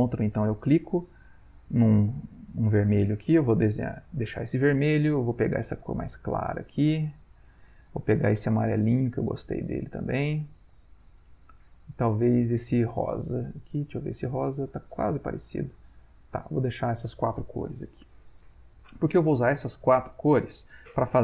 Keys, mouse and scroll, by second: 0.6-2.3 ctrl+drag, 3.8 click, 5.6 ctrl+click, 6.4-8.3 drag, 8.8 ctrl+click, 12.4 ctrl+click, 15.1 ctrl+z, 16.2-17.8 drag.